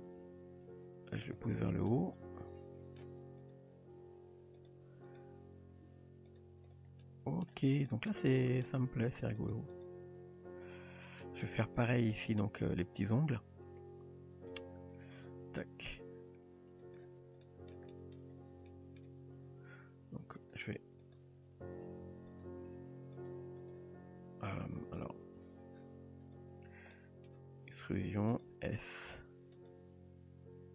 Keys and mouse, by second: 0.0 g, 1.9-3.0 middle drag, 3.9 g, 5.1 click, 5.9 g, 6.7 click, 7.0-7.5 middle drag, 8.1-8.6 middle drag, 8.9 g, 9.7 click, 10.4 Tab, 11.1 middle click, 12.1-12.4 middle drag, 14.5 Tab, 15.5 Tab, 16.9 click, 17.4 middle drag, 17.9 middle drag, 18.7 middle drag, 20.4 click, 21.0 click, 21.9 g, 22.7 s, 23.4 g, 25.5 click, 26.9-27.3 middle drag, 27.8 e, 28.6 s, 29.8 g.